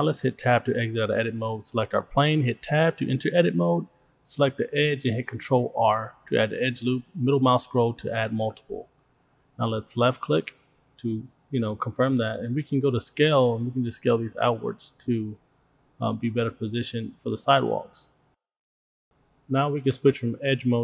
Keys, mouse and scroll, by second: 0.5 Tab, 1.3 middle click, 1.6 click, 2.7 Tab, 5.0 ctrl+r, 11.8 click, 13.4-19.1 drag, 20.6 click.